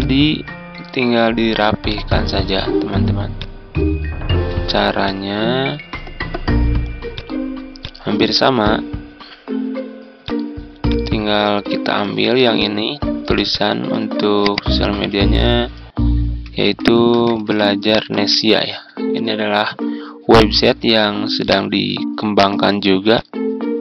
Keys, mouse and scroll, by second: 4.4 z, 5.0-7.7 drag, 11.9 ctrl+d, 12.5 click, 14.4 click, 15.1 ctrl+a, 16.2-19.1 typing, 21.3 click, 22.1 ctrl+scroll up 1, 23.0 click.